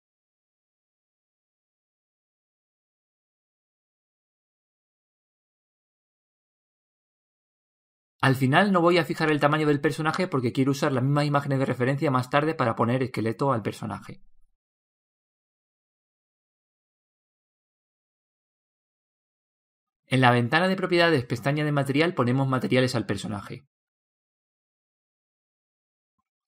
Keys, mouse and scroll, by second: 0.2 KP_3, 2.4 click, 6.5 z, 8.4 Tab, 9.1-10.8 middle drag, 11.6-20.8 middle drag, 14.2 click, 20.8 scroll up 1, 22.7-26.4 drag.